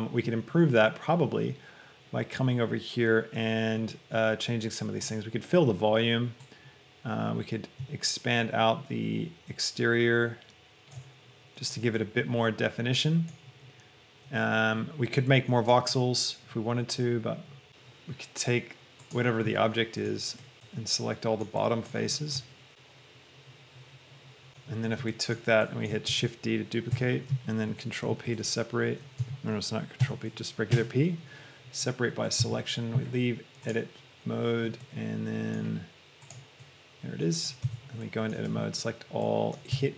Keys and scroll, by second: 20.5 Tab, 26.3 shift+d, 27.1 Escape, 28.5 ctrl+p, 29.3 ctrl+Escape, 30.4 p, 31.2 Return, 32.7 Tab, 37.7 Tab, 38.8 a, 39.9 e.